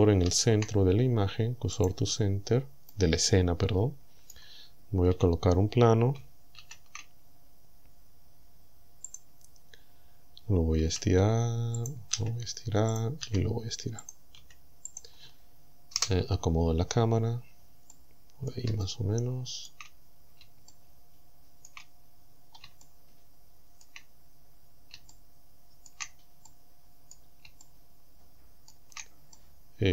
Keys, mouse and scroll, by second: 0.3 shift+s, 1.8 click, 2.3-2.6 scroll down 2, 2.9-4.5 drag, 5.2 a, 6.6 shift+a, 9.1 click, 9.6-10.2 scroll down 2, 10.9 s, 11.8 click, 12.2 s, 13.0 click, 13.3 s, 14.1 click, 14.4 s, 14.9 click, 16.0 KP_0, 17.2-17.6 scroll up 2, 17.9 middle click, 18.8-19.9 shift+middle drag, 20.1-20.4 shift+scroll up 3, 20.7-21.9 shift+middle drag, 22.1-22.6 shift+scroll up 3, 22.8-24.0 shift+middle drag, 24.3-24.6 shift+scroll up 3, 25.1 shift+middle click, 26.5 middle click, 27.6-28.9 shift+middle drag, 29.4-29.9 middle drag.